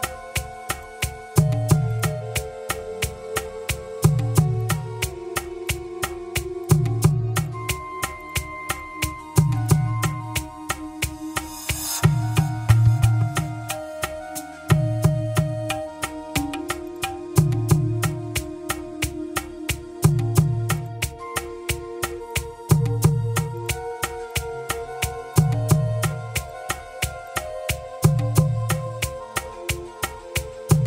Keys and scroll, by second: 3.2 Return, 10.4 Return, 18.9 BackSpace, 28.5 Return.